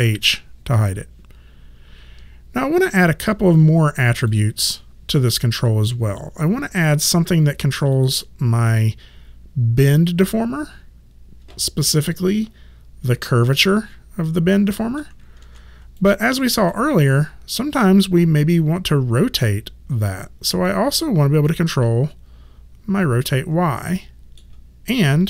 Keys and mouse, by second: 0.1 ctrl+h, 4.2 click, 7.9 click, 12.0 click, 13.7 middle click, 15.4 ctrl+z, 16.0 alt+click, 16.7 middle click, 20.5 click, 21.5 middle click.